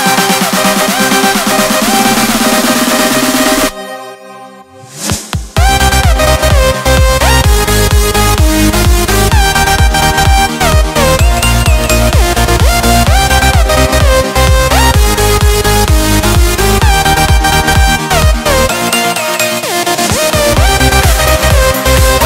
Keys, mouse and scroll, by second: 4.5 click, 8.4 click, 9.7 Escape, 11.3 l, 14.0 click, 17.7 click, 19.6 Escape.